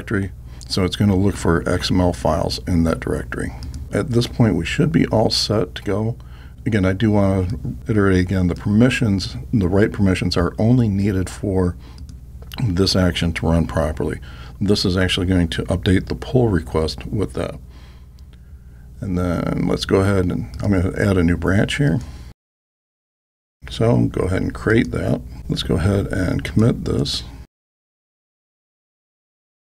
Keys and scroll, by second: 25.0 alt+super+n.